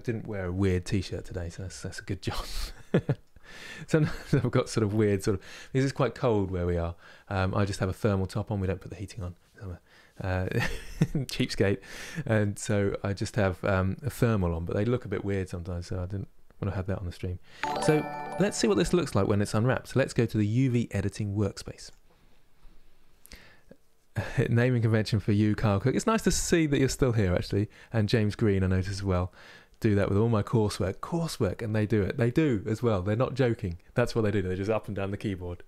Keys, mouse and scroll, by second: 21.5 click.